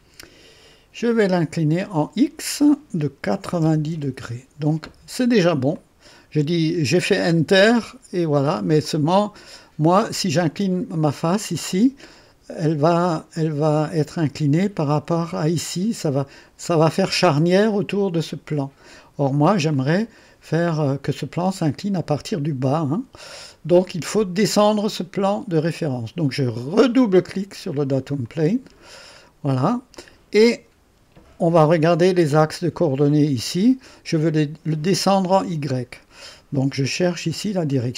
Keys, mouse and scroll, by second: 1.1 click, 3.3 KP_9, 3.6 KP_0, 3.9 KP_Enter, 5.7 click, 8.8-9.6 drag, 13.2-14.0 drag, 19.7-21.1 drag, 23.8 click, 28.0 click, 29.2-29.5 scroll down 1, 29.9-30.8 drag.